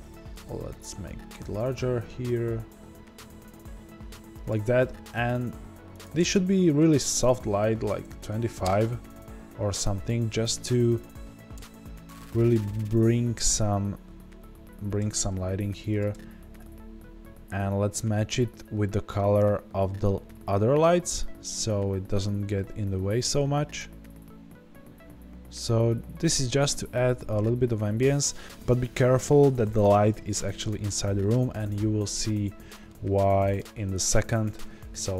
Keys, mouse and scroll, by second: 0.0 g, 0.4 click, 8.7 KP_Enter, 8.7-10.0 drag, 10.0-31.8 middle drag, 11.5 KP_0, 16.5 click, 27.6-28.2 scroll up 2, 31.8-32.8 scroll down 2, 32.8-35.1 middle drag, 33.8 scroll up 1.